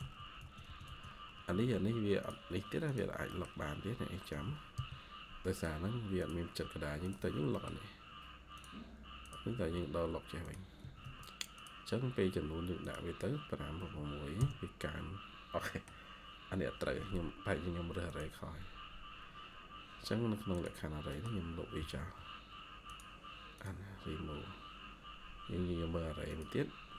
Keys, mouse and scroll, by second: 0.0-1.5 typing, 0.7 Tab, 1.6 Escape, 3.2 middle click, 7.4 middle click, 10.7 Escape, 10.9 Escape, 11.8 scroll down 1, 13.7 typing, 14.3 Return, 15.2 scroll down 1, 15.5 middle click, 15.9-16.9 scroll down 1, 21.0 middle click, 21.4-22.4 typing.